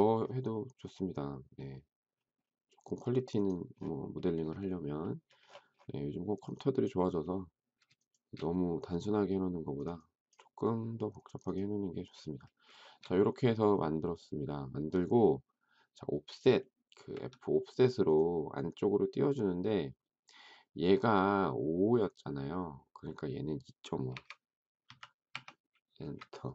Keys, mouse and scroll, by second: 7.9 shift+click, 12.8 shift+middle click, 17.1 f, 23.9-25.7 typing, 26.0 Return.